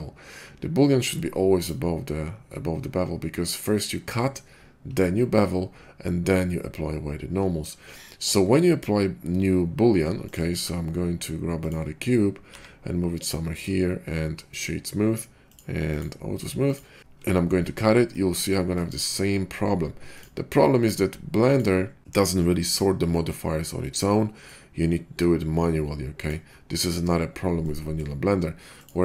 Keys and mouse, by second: 1.6-16.6 drag, 10.2 middle click, 10.2 right click, 10.4 shift+a, 12.4 g, 15.5 middle click, 15.5 right click, 16.6 middle click, 16.8 click, 16.9 ctrl+KP_Subtract, 20.0 middle click, 20.2-21.5 drag, 21.5-26.2 middle drag, 26.2-28.9 drag.